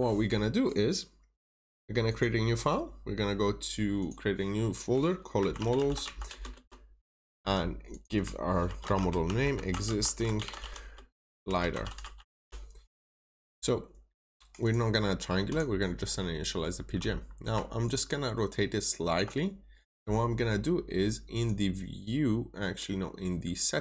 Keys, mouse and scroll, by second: 2.0 click, 5.5-5.9 typing, 6.4 Return, 7.8 click, 8.7-12.0 typing, 12.3 Return, 14.5 click, 16.4-16.7 scroll up 1, 17.1 scroll down 1, 17.7 ctrl+shift+click, 21.2 click.